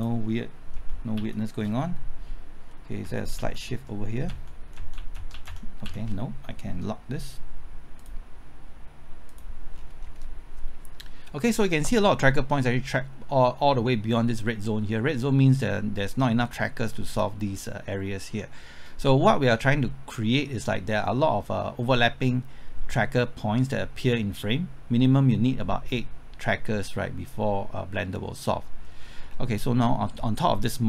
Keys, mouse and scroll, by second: 0.8 Right, 1.2 Left, 3.0 Right, 3.4-4.3 typing, 4.5 Left, 4.8 Right, 5.0 Left, 5.2 Right, 5.3 Left, 5.5 Right, 8.0 Left, 8.0 click, 9.8-11.0 scroll down 1, 19.7 scroll up 1, 19.9 middle click, 20.4 scroll down 1, 20.7 scroll up 1, 21.0-29.1 middle drag.